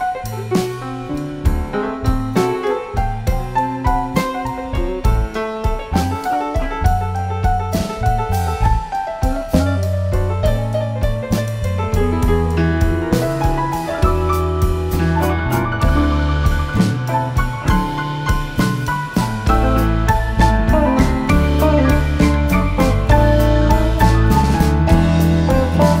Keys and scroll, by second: 3.9 F7, 5.3 F1, 7.1-8.6 typing, 18.3 typing, 20.2 space, 21.9 shift+F6.